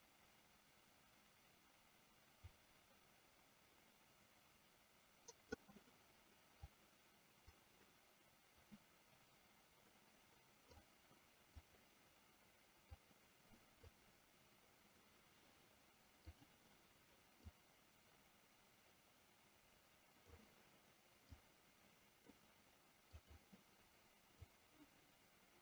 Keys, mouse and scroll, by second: 6.7-10.9 drag, 11.8 click, 13.1 click, 17.7-20.4 drag, 21.5 click, 23.3 click, 24.6-25.6 drag.